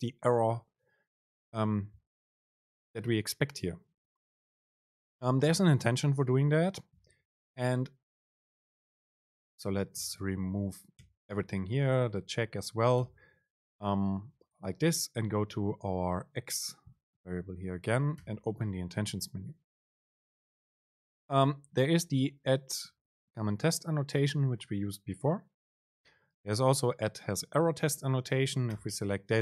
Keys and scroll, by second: 10.0 super+Right, 11.2 BackSpace, 11.7 super+Left, 13.1 BackSpace, 14.0 Right.